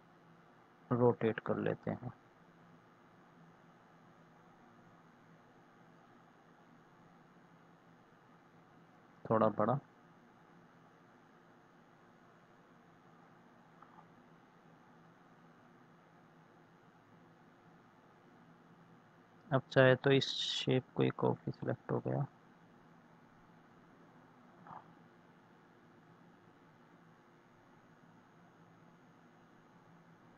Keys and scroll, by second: 25.1 Left.